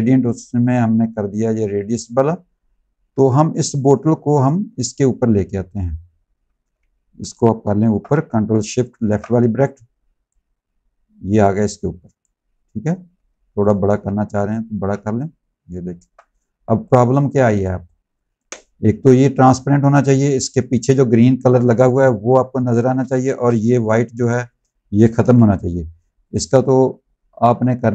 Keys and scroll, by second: 3.0 v, 6.4 ctrl+z, 16.5 z, 17.4 space, 22.9 space, 24.1 space, 25.1 v.